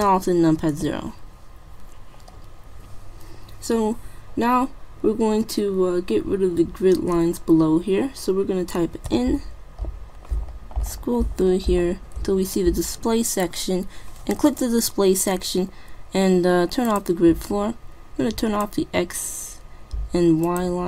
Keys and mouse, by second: 0.5 ctrl+alt+KP_0, 9.1 n, 10.3-13.8 middle drag, 14.5-16.2 drag, 16.9-20.1 drag, 20.4-20.8 drag.